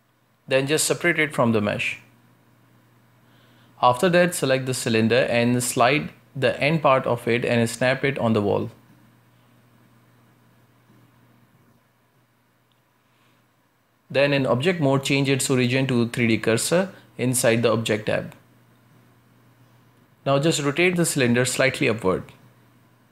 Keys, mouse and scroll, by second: 1.0-2.2 shift+middle drag, 2.2 p, 3.2-5.2 middle drag, 3.2-3.8 scroll up 4, 5.2 Tab, 6.0 right click, 7.0 Tab, 7.9 z, 8.5 a, 8.7 a, 9.2 b, 10.5 click, 11.1 z, 11.5 g, 13.7 Tab, 17.3-18.6 drag, 18.6 scroll down 1, 19.3-20.2 shift+middle drag, 20.2 z, 20.5-21.1 shift+middle drag, 21.1 scroll up 1, 21.7 r.